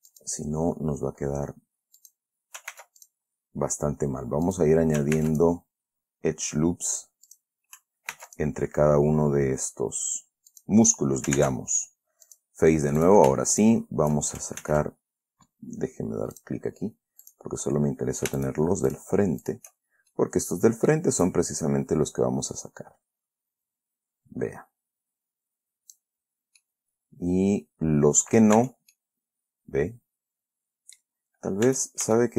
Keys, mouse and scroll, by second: 0.4 click, 2.3 click, 3.1 ctrl+r, 3.4 ctrl+click, 4.8 click, 5.5 ctrl+r, 5.7 ctrl+click, 7.6 click, 8.5 ctrl+r, 8.6 ctrl+click, 10.9 click, 11.7 ctrl+Tab, 12.6 click, 13.3 click, 13.9 shift+click, 14.9 ctrl+shift+z, 16.7 click, 17.6 right click, 18.7 shift+right click, 19.2 shift+right click, 19.8 shift+right click, 20.2-20.5 shift+scroll down 1, 20.5 shift+middle click, 22.0-26.5 drag, 26.9-28.9 middle drag, 28.9 Tab, 29.3-31.5 drag, 32.0 Tab.